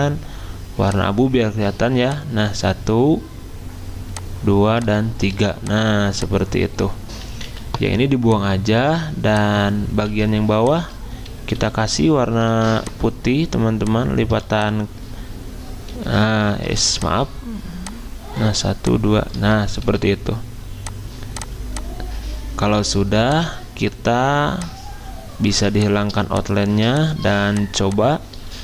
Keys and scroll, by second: 5.3 v, 7.5 Delete, 8.8 Delete, 11.6 d, 12.5 ctrl+z, 16.0 d, 16.7 ctrl+z, 19.8 d, 22.8 d, 25.5 z.